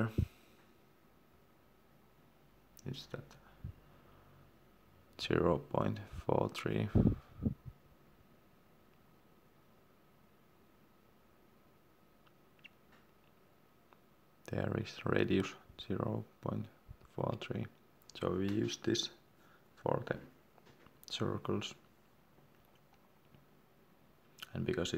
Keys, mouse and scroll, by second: 3.5-5.7 scroll up 1, 10.7-11.3 scroll down 1, 16.8 click.